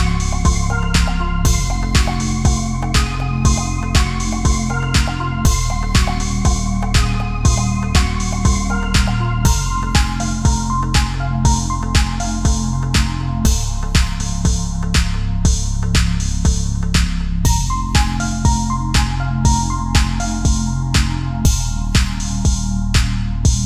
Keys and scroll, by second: 5.6 ctrl+-, 6.3 ctrl+=, 14.6 Up, 14.8 Right, 14.9 Up, 15.8 Up, 15.9 Left, 16.7 Left, 16.8 Down, 16.9 Left, 17.2 Down, 18.2 Left, 18.6 Right, 18.7 Down, 19.0 Up, 20.1 Left.